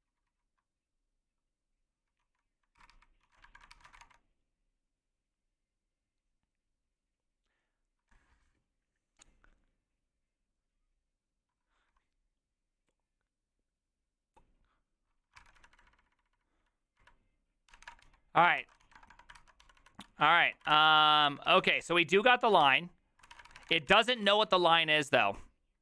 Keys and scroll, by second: 2.2-4.4 typing, 2.7 ctrl+c, 2.9 ctrl+c, 15.4 ctrl+c, 15.6-16.0 typing, 17.5-25.0 typing, 18.6 ctrl+c, 22.6 ctrl+c.